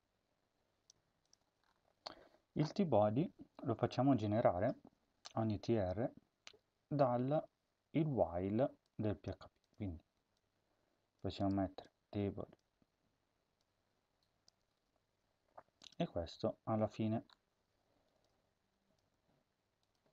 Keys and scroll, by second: 0.8 Tab, 14.6 ctrl+c, 16.6 ctrl+v, 19.0 BackSpace.